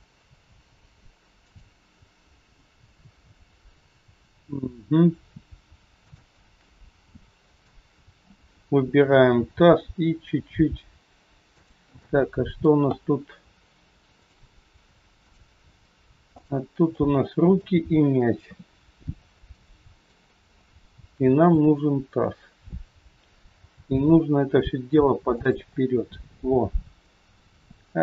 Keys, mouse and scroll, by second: 2.1 scroll down 1, 5.2-5.5 scroll up 3, 6.0 shift+click, 9.4 g, 11.9 middle click, 12.9 scroll up 2, 14.6 click, 14.6 scroll up 1, 15.2 shift+click, 16.9 middle click, 18.4 KP_3, 19.4 shift+middle click, 21.4 shift+click, 22.0-23.4 scroll down 2, 23.5 g, 25.7 scroll down 1.